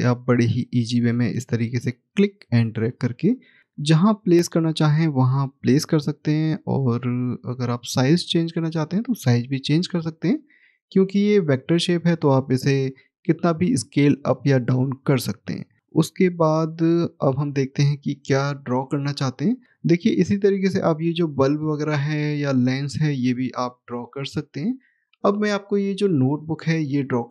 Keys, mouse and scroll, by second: 2.5 click, 4.5 scroll up 1, 5.5 click, 15.6 scroll down 1, 16.2 middle click, 19.9-21.8 scroll up 1, 21.8-22.4 scroll down 1, 22.4 middle click, 26.3 middle click.